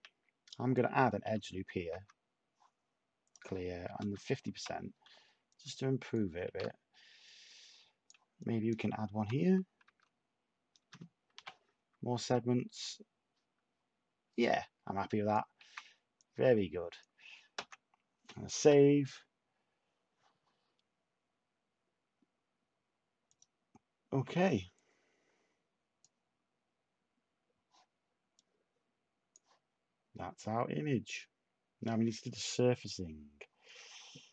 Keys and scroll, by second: 1.2-2.4 typing, 4.0 /, 6.4 a, 9.2-9.8 typing, 11.3 typing, 15.5 a, 17.5 s.